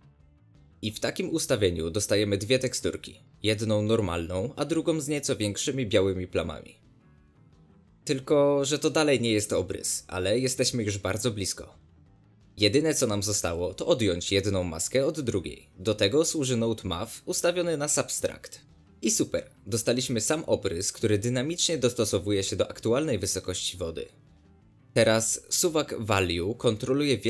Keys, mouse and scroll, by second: 0.0-4.7 drag, 5.3 ctrl+shift+click, 6.0 ctrl+shift+click, 6.5 ctrl+shift+click, 7.0 ctrl+shift+click, 7.3 ctrl+shift+click, 7.6 ctrl+shift+click, 9.3 shift+d, 13.5 click, 15.1 click, 16.5-20.2 middle drag, 20.2-27.2 shift+drag.